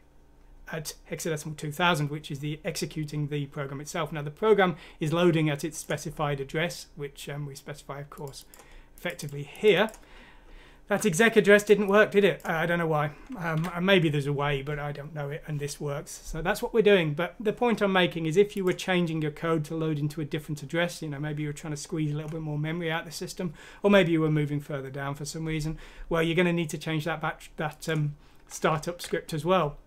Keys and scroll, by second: 13.6 alt+Tab, 28.7 ctrl+z.